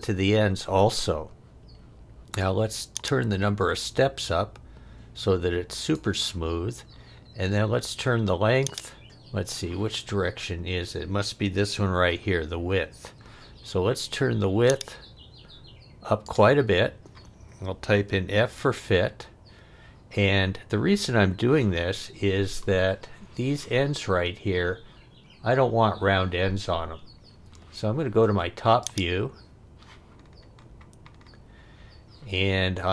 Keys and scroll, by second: 9.0 super+z, 18.1 f, 19.0 f.